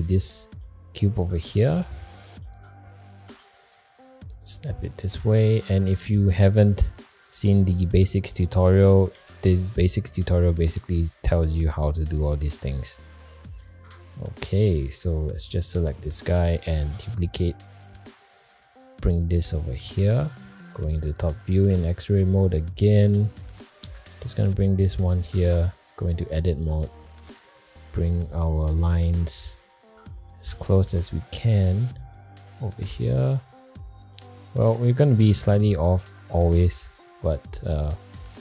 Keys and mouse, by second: 0.6 shift+middle click, 1.5 click, 2.4 shift+middle click, 3.2 g, 6.3 shift+middle click, 6.9 middle click, 7.7 shift+middle click, 8.3 middle click, 9.1 alt+z, 10.2 middle click, 11.0 middle click, 13.0 shift+middle click, 13.5 middle click, 13.8 Tab, 14.8 click, 15.3 click, 15.9 shift+middle click, 16.8 shift+d, 20.4 alt+middle click, 21.7 alt+z, 23.0 g, 25.0 shift+middle drag, 25.5 Tab, 26.0 click, 27.0 g, 28.4 click, 29.6 shift+middle click, 30.4 g, 34.1 shift+middle click, 35.5 shift+middle click, 37.6 click.